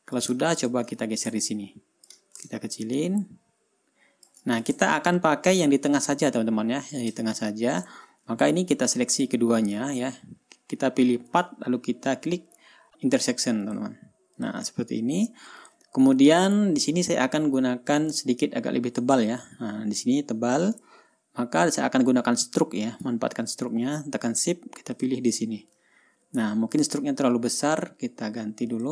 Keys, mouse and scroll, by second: 0.4 scroll down 2, 1.1 shift+click, 1.5-2.8 ctrl+shift+drag, 3.3-4.9 ctrl+shift+drag, 5.0 ctrl+shift+click, 5.4 scroll up 2, 5.9-6.7 ctrl+scroll down 2, 8.4 ctrl+scroll down 2, 9.0-9.9 ctrl+drag, 11.8 click, 14.2 click, 14.9 click, 15.5-16.1 ctrl+scroll up 2, 16.1 ctrl+click, 18.7-19.0 ctrl+scroll down 2, 19.3-19.9 ctrl+scroll up 4, 21.3 ctrl+scroll down 2, 22.3 ctrl+scroll up 2, 22.8 ctrl+scroll down 2, 25.4 shift+click, 26.3 ctrl+scroll down 2, 26.9-27.2 ctrl+scroll up 2.